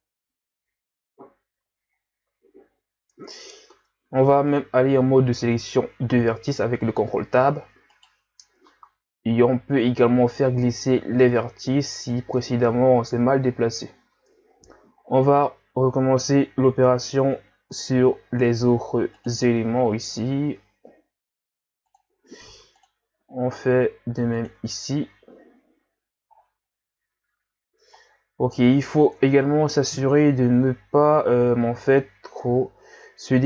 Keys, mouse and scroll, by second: 0.0 Tab, 2.0-2.6 scroll down 1, 2.6 scroll up 2, 3.1 Tab, 3.7 ctrl+Tab, 7.9 alt+right click, 8.8 ctrl+e, 12.4 Tab, 13.0-13.8 scroll down 3, 13.8-14.5 scroll up 8, 14.5-16.2 scroll down 10, 16.7 Tab, 17.7 ctrl+r, 22.4 ctrl+r, 24.6 Tab, 25.7-26.4 scroll down 1, 26.4-26.7 scroll down 1, 26.7 scroll up 3, 28.1-28.6 scroll down 1, 28.9-29.2 scroll up 1, 29.2 Tab, 30.3-31.0 scroll down 2, 31.5-32.2 scroll down 4, 32.3 z, 32.8-33.4 scroll up 1.